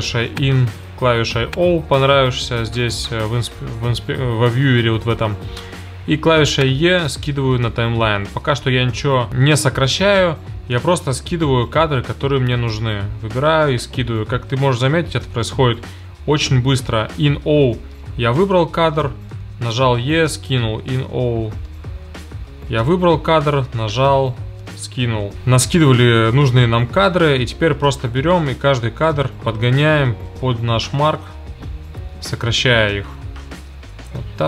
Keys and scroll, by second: 0.4 i, 1.3 o, 9.3 e, 11.2 i, 11.9 o, 13.1 e, 14.7 i, 15.5 o, 16.3 e, 17.8 i, 18.6 o, 19.2 e, 21.6 i, 22.3 o, 22.7 e, 24.6 i.